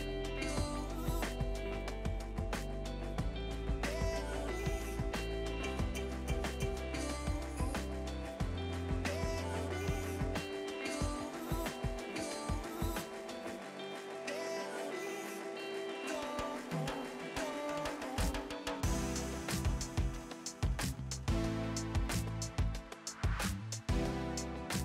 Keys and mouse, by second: 0.6 click, 1.6 y, 2.9 click, 3.3 ctrl+click, 4.5 right click, 4.9 click, 6.0 click, 7.7 Pause, 8.0 click, 8.7 c, 8.8 click, 9.4 ctrl+e, 9.5 click, 9.9 click, 10.1 Delete, 10.3 ctrl+click, 10.7 click, 10.9 Delete, 12.6 click, 12.7 right click, 13.4 click, 13.9 1, 14.3 click, 15.1 click, 15.9 x, 16.1 Return, 16.7 click, 16.8 right click, 17.0 click, 17.6 KP_0, 17.8 click, 19.5 click, 21.0 click, 22.0 click, 22.4 click, 22.9 Escape, 23.5 click.